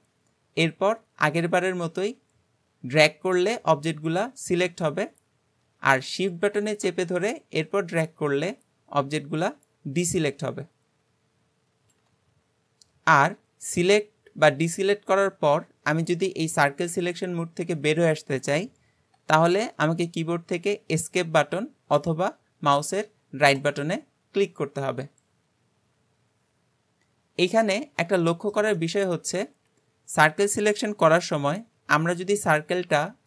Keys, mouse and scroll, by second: 28.2-29.4 shift+middle drag, 29.4-31.2 scroll up 2, 31.2 c.